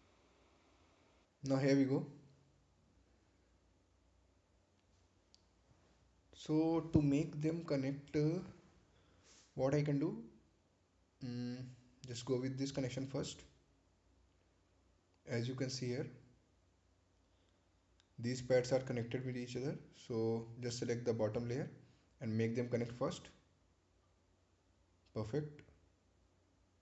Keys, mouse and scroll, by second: 2.0-2.3 scroll down 1, 4.2 scroll down 1, 6.4 click, 7.5-8.0 scroll up 1, 10.5-10.9 scroll up 1, 10.9 ctrl+click, 13.7 ctrl+click, 14.0 ctrl+click, 19.8 click.